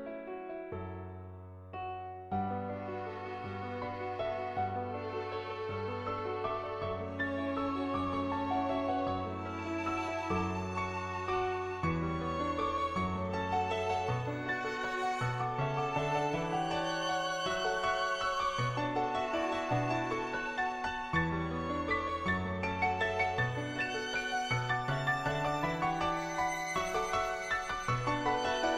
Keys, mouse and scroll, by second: 0.6 click, 1.8 ctrl+z, 2.3-2.9 ], 2.9 click, 3.4-5.1 drag, 5.3 click, 6.2 click, 6.6 middle click, 7.5-10.0 middle drag, 10.6 middle click, 11.0 click, 11.2 middle click, 11.9-13.2 drag, 13.7 click, 14.8 click, 16.3 middle click, 16.7 middle click, 17.2 click, 17.9 shift+a, 18.0 shift+click, 18.6 shift+click, 19.4 shift+click, 20.4 shift+click, 21.4 shift+click, 21.9 middle click, 22.6 middle click, 23.6 middle click, 24.6 shift+click, 25.2 middle click, 25.8 shift+click, 26.8 middle click, 27.5 shift+click, 28.6 click.